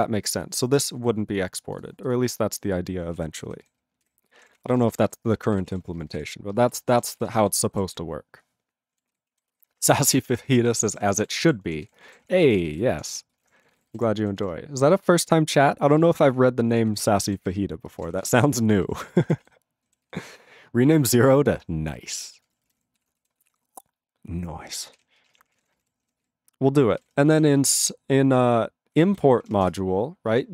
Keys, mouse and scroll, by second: 0.1 click, 0.4 click, 0.8 click, 1.3 click, 1.4 click, 1.8 click, 2.1 click, 3.3 ctrl+a, 3.5 ctrl+/, 3.6 ctrl+/, 4.4 ctrl+p, 4.5 ctrl+a, 4.6 ctrl+p, 4.7 ctrl+space, 4.7 ctrl+e, 4.8 ctrl+n, 4.9 ctrl+n, 5.0 ctrl+g, 5.6 ctrl+s, 5.7 ctrl+a, 5.8 ctrl+p, 5.9 ctrl+space, 6.0 ctrl+n, 6.1 ctrl+n, 6.2 ctrl+w, 6.5 ctrl+space, 6.6 ctrl+e, 6.7 ctrl+g, 6.9 ctrl+space, 6.9 ctrl+a, 7.1 ctrl+p, 7.2 ctrl+g, 7.3 ctrl+n, 7.4 ctrl+n, 7.5 ctrl+e, 8.0 ctrl+s, 9.1 ctrl+s, 9.3 ctrl+a, 9.5 ctrl+space, 9.5 ctrl+e, 9.6 ctrl+g, 9.7 ctrl+space, 9.8 ctrl+p, 9.9 ctrl+p, 10.0 ctrl+g, 10.0 ctrl+e, 10.1 ctrl+n, 10.2 ctrl+n, 10.3 ctrl+e, 10.7 ctrl+s, 10.8 ctrl+space, 10.9 ctrl+a, 11.0 ctrl+p, 11.1 ctrl+g, 11.2 ctrl+e, 11.3 ctrl+n, 11.4 ctrl+n, 11.4 ctrl+e, 11.9 ctrl+s, 12.0 ctrl+space, 12.0 ctrl+a, 12.1 ctrl+p, 12.3 ctrl+p, 12.5 ctrl+g, 12.6 ctrl+n, 12.7 ctrl+n, 12.7 ctrl+e, 13.1 ctrl+s, 13.3 ctrl+space, 13.4 ctrl+a, 13.5 ctrl+p, 13.6 ctrl+p, 13.7 ctrl+g, 13.8 ctrl+e, 13.9 ctrl+n, 14.0 ctrl+e, 14.4 ctrl+s, 15.9 ctrl+space, 16.0 ctrl+p, 16.2 ctrl+p, 16.3 ctrl+e, 16.9 ctrl+s, 17.2 ctrl+n, 17.3 ctrl+n, 17.4 ctrl+e, 17.9 ctrl+space, 18.0 ctrl+a, 18.0 ctrl+p, 18.1 ctrl+p, 18.2 ctrl+g, 18.3 ctrl+e, 18.5 ctrl+a, 18.6 ctrl+space, 18.7 ctrl+n, 18.8 ctrl+n, 19.1 ctrl+g, 19.4 ctrl+s, 20.1 ctrl+s, 21.2 ctrl+p, 21.5 ctrl+e, 21.9 alt+b, 22.1 alt+b, 22.4-23.5 typing, 25.0 ctrl+s, 25.2 ctrl+space, 25.3 ctrl+a, 25.5 ctrl+p, 25.6 ctrl+g, 25.6 ctrl+n, 25.8 ctrl+n, 26.2 ctrl+s, 30.3 ctrl+a.